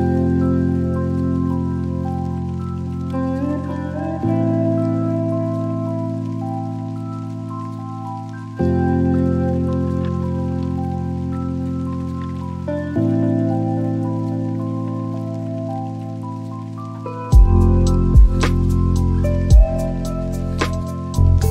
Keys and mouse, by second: 1.1 click, 2.5-5.0 drag, 5.2-7.5 drag, 12.0 g, 12.5 x, 17.3 click, 19.4 shift+middle click.